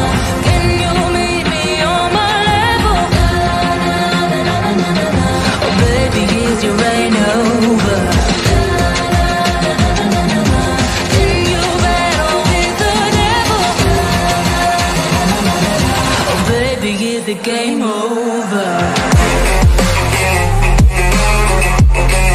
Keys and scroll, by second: 6.5 Right, 8.6 F3, 8.9 shift+F2, 9.7 ctrl+z, 10.0 F4, 12.8 space, 17.9 F3, 18.2 shift+F2.